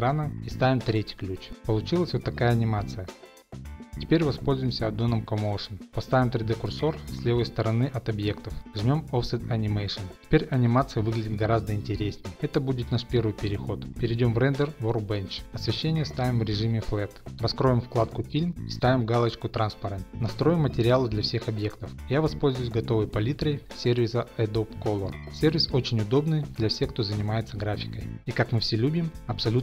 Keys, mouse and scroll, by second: 0.3 middle click, 1.4 click, 1.4 i, 4.5 Left, 4.5 click, 5.1 click, 6.0 shift+middle click, 6.1 middle click, 6.3 middle click, 7.7 middle click, 8.1 shift+right click, 8.1-8.5 scroll, 10.0 click, 15.5 click, 16.0 click, 16.7 click, 18.1 click, 19.4 click, 19.8 click, 20.2 click, 20.6 click, 21.1 click, 21.5 click.